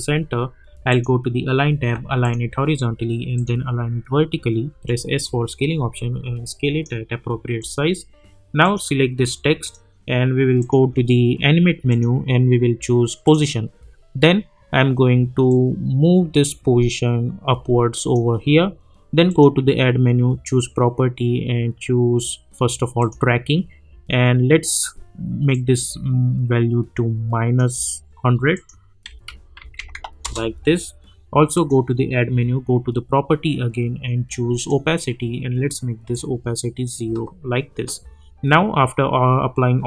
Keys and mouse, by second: 0.9 click, 4.7 s, 5.2-7.6 drag, 15.5-19.3 drag, 23.0 click, 25.5-28.5 drag, 29.1 -, 30.2 Return, 31.5 click, 34.5-39.8 drag.